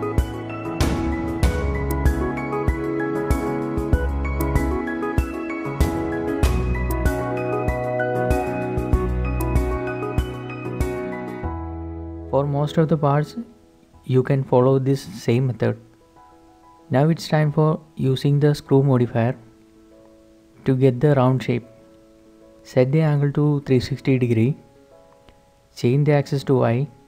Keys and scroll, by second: 0.0-10.2 typing, 10.9 shift+Tab, 11.5 a, 12.8 g, 13.7 Escape, 22.5-22.9 typing, 23.2 Return.